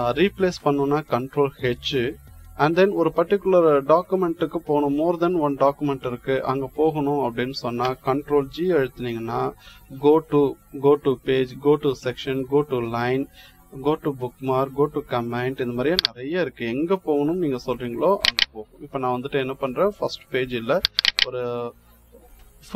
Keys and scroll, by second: 8.4 ctrl+g.